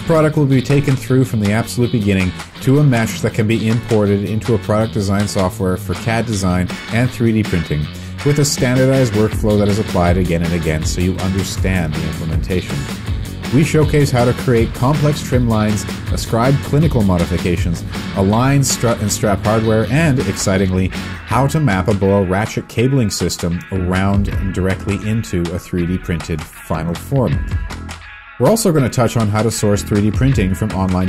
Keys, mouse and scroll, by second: 0.7 z, 7.1 w, 8.0 q, 9.6 typing, 10.8 typing, 13.4 space, 14.3 shift+space, 17.1 ctrl+space, 18.2 Return, 23.1 f, 25.3 ., 25.8 5, 27.3 Return.